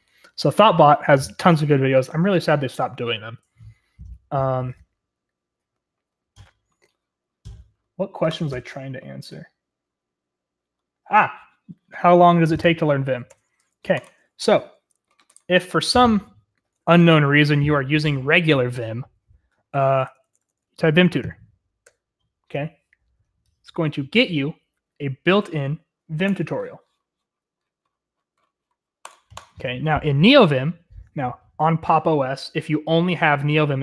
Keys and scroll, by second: 17.0 ctrl+l, 19.7-21.8 typing.